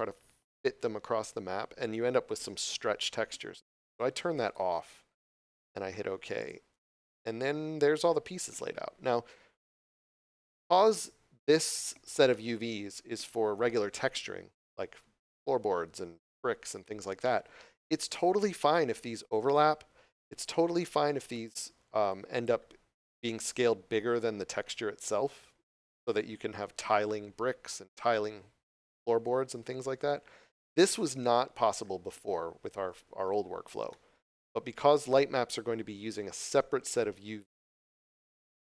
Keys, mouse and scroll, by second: 4.4 click, 8.2 scroll up 1, 20.3 scroll down 1, 22.0 click, 23.1 s, 30.6 right click, 33.1 scroll up 1, 34.3 scroll up 1.